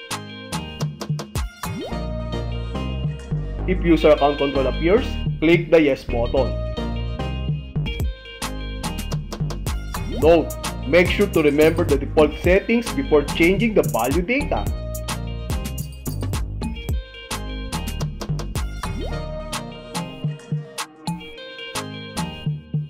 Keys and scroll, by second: 2.6 Return, 6.8 Left, 8.3 space, 16.2 h, 17.4 h, 18.4 h, 20.4 Right, 22.2 s.